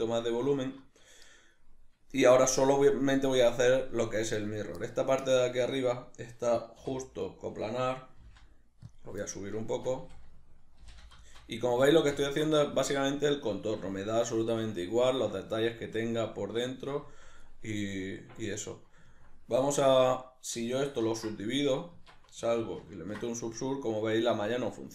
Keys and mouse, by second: 0.1 click, 0.3-7.0 middle drag, 6.8 3, 7.0 right click, 8.2 g, 8.9 click, 9.2-10.8 middle drag, 10.0 a, 10.8 shift+n, 11.2 shift+middle click, 11.7 a, 12.2-24.9 ctrl+middle drag, 21.1 ctrl+2, 21.9 Tab, 23.1 ctrl+2.